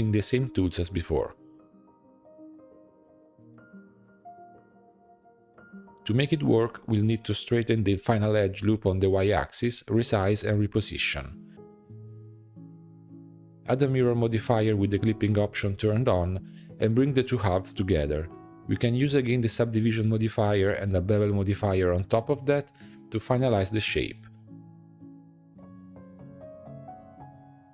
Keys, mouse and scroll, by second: 0.0 Tab, 0.5 shift+middle click, 0.8 scroll up 3, 0.9 alt+e, 3.9 shift+middle click, 4.3 ctrl+r, 5.1 alt+s, 5.7 shift+middle click, 5.8 click, 5.9 Tab, 6.0 scroll up 2, 6.5 shift+middle click, 6.7-7.1 scroll up 3, 7.1 alt+click, 7.7 shift+middle click, 8.0 s, 9.4 s, 10.3 click, 10.9 g, 11.8 s, 12.8 g, 13.6-14.6 drag, 14.7-15.7 drag, 15.7 shift+middle drag, 15.9-16.9 scroll up 4, 16.1 Tab, 16.3 shift+middle click, 16.9 g, 18.3 g, 20.3 Tab, 20.5 scroll down 1, 20.6-21.6 shift+middle drag, 21.6-24.8 drag, 25.1-27.0 drag, 27.0 Tab, 27.2 2.